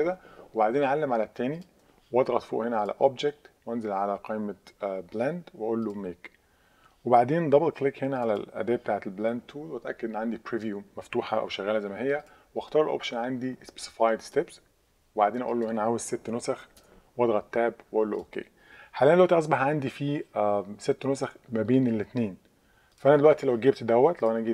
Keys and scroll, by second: 16.6 6, 16.8 Tab.